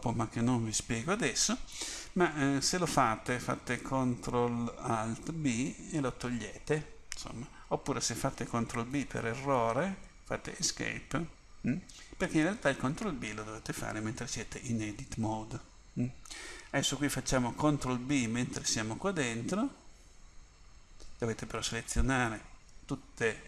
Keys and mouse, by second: 5.5 ctrl+alt+b, 9.0 ctrl+b, 14.4 Tab, 18.2 ctrl+b, 21.8 a.